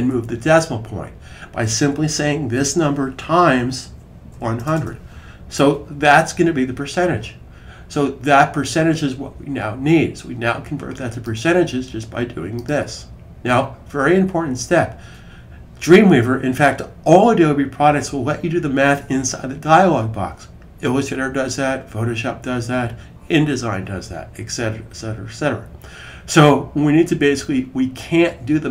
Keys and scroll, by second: 3.4-5.1 typing.